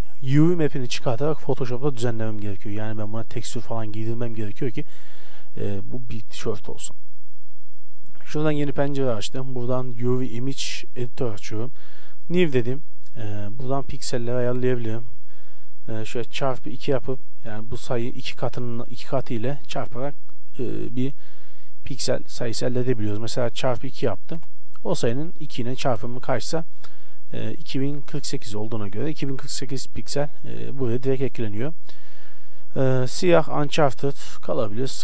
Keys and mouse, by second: 6.7-35.0 drag.